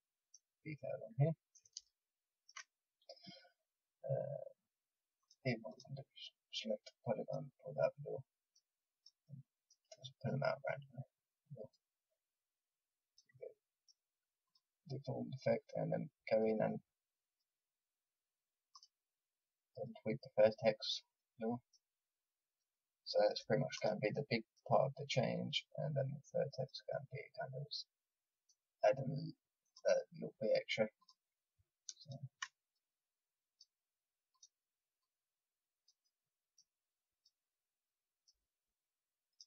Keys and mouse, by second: 5.1-8.1 drag, 8.1 middle click, 8.9-17.0 drag, 17.0 middle click, 17.2-22.2 drag, 22.2 middle click, 23.7-27.1 drag, 27.5 middle click, 29.6-39.4 drag.